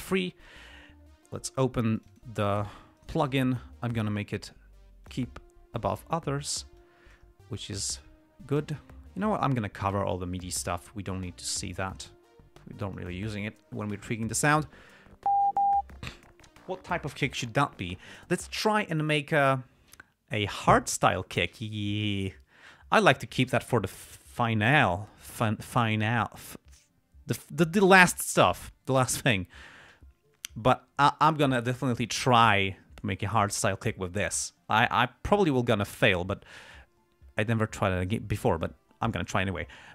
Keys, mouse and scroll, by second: 0.5 click, 2.3 click, 3.3 right click, 5.4 click, 6.1 click, 7.9-9.7 drag, 11.8-13.5 drag.